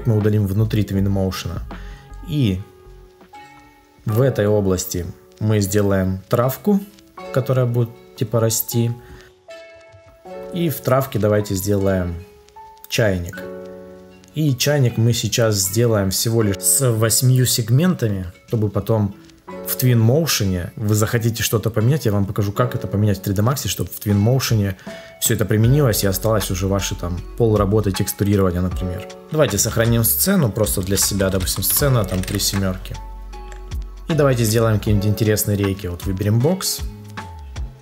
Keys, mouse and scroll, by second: 29.6 ctrl+s, 33.3 Return.